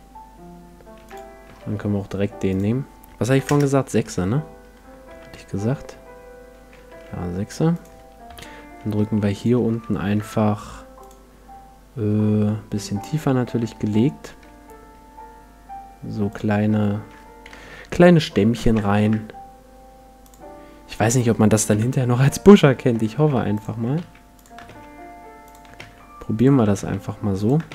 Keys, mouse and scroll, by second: 1.4 t, 2.5-4.2 drag, 4.2 middle click, 6.9 z, 7.8-12.8 drag, 8.3 KP_1, 9.0 s, 10.0 g, 13.4 middle click, 13.6 Tab, 13.6-16.3 middle drag, 14.4 e, 17.5 click, 17.5 e, 17.5 l, 18.6 s, 20.3-22.2 drag, 21.7 KP_7, 22.9 g, 23.6-27.4 drag, 24.0 shift+d, 24.7 shift+d, 25.8-27.7 typing.